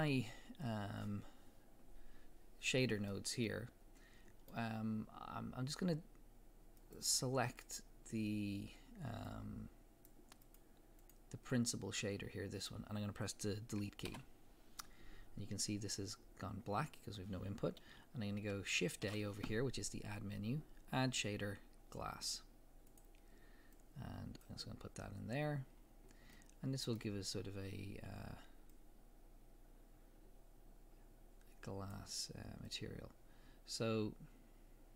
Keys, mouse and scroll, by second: 3.1-6.8 middle drag, 6.8 click, 7.5 click, 9.3 click, 10.5 click, 11.0 click, 11.5 click, 14.1 Delete, 19.1 shift+a, 23.0 click, 23.8-26.4 drag, 25.8 scroll up 2, 26.4 middle click, 28.7-34.9 drag.